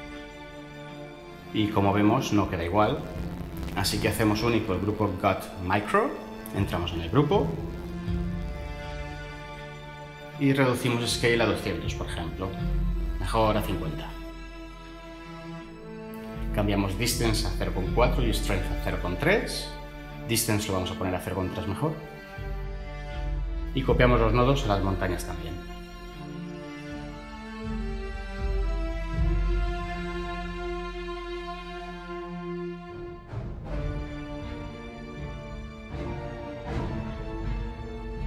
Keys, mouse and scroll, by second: 3.5 Tab, 5.2 Tab, 11.2-11.6 typing, 12.1 Return, 13.2 typing, 13.5 Return, 18.1 typing, 18.4 Return, 19.9 typing, 21.6 typing, 24.2 Tab, 26.8 ctrl+v.